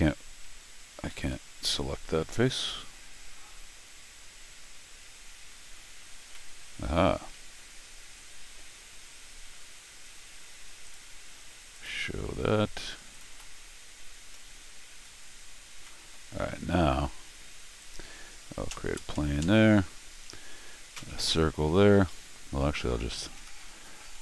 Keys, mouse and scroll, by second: 0.9 ctrl+q, 1.5 middle click, 2.0 middle click, 4.7 scroll down 1, 6.3 middle click, 8.9 scroll up 2, 9.6 scroll down 2, 10.8 click, 11.7 click, 13.1 click, 14.3-15.7 scroll down 8, 15.7 middle click, 17.8 click, 20.9 c, 22.1 Escape, 23.1 click, 23.4 g.